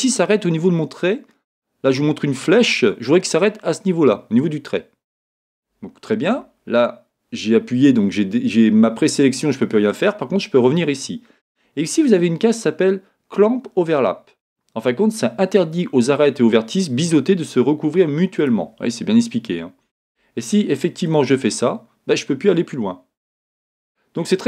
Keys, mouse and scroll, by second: 5.5 click, 18.4 click, 21.3-24.4 drag.